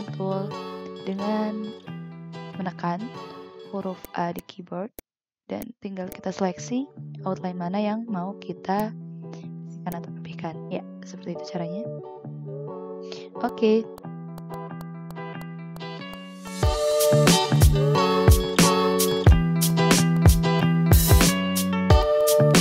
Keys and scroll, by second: 5.4 ctrl+z, 13.4 v, 15.7 ctrl+z, 16.2 v, 17.6 ctrl+z, 20.2 ctrl+z, 20.4 ctrl+z, 21.1 c, 21.4 v.